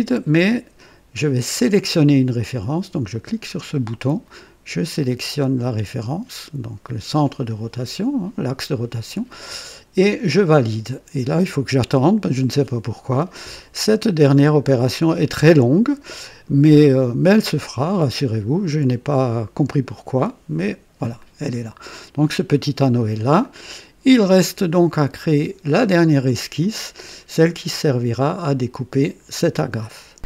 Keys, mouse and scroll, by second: 3.1 click, 5.8 click, 10.3 click, 21.1-22.6 drag, 23.4 click, 25.1 click, 26.0 scroll down 2, 26.6-27.2 right drag.